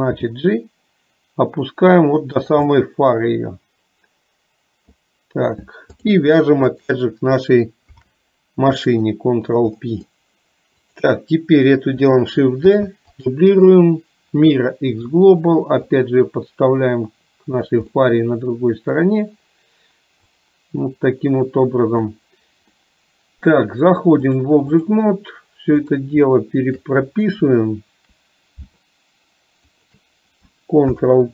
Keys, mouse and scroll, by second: 2.7 scroll up 1, 2.8-5.0 middle drag, 6.1 click, 6.8 shift+click, 9.8 middle click, 10.9 click, 13.6-15.2 right drag, 15.8-17.7 drag, 18.0 scroll up 1, 18.1 middle click, 20.4-22.1 drag, 22.9 scroll up 1, 23.0 middle click, 24.3 click, 25.8 click, 26.7 shift+click, 29.7 shift+click.